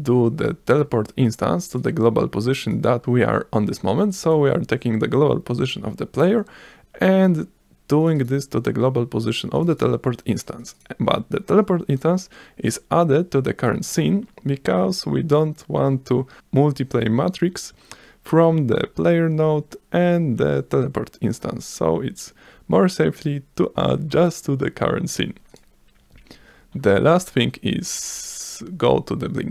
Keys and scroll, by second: 28.5 s.